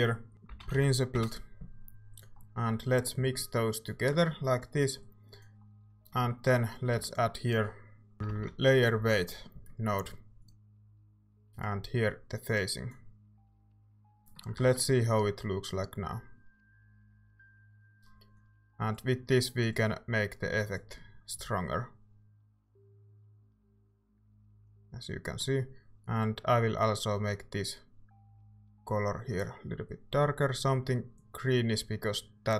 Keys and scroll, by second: 0.3-1.2 typing, 7.0-9.0 typing, 13.8 ctrl+s, 14.6 z.